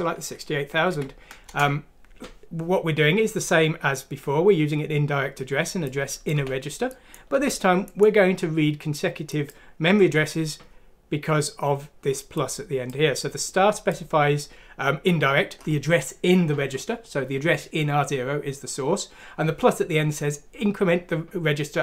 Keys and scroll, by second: 0.9 F6, 1.4 Return, 6.3 typing, 7.3 typing.